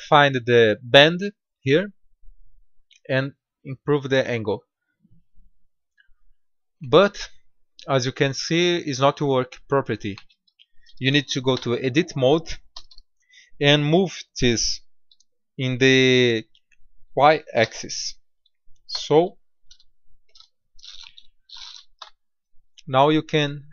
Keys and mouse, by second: 0.8-2.6 drag, 2.8-4.2 drag, 6.3-9.6 middle drag, 11.5 Tab, 12.6 a, 12.8 a, 17.5 r, 21.9 Tab.